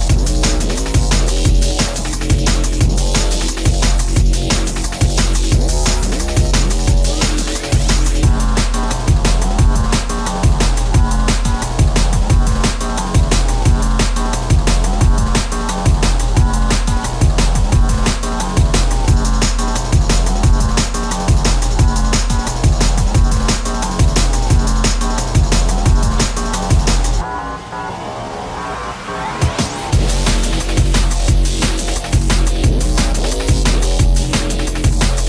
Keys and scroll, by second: 7.6 shift+space, 8.8 p, 10.8 shift+space, 13.6 ctrl+f, 15.9 shift+x, 18.4 ctrl+z, 18.4 space, 19.6 shift+x, 28.2 s, 34.0 ctrl+e.